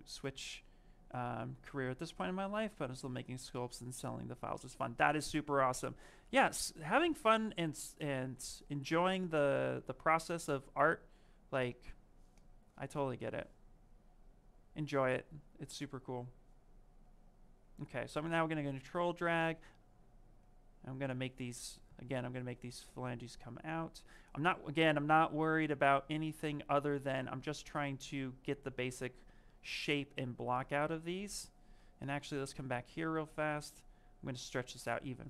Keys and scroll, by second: 31.7 ctrl+z.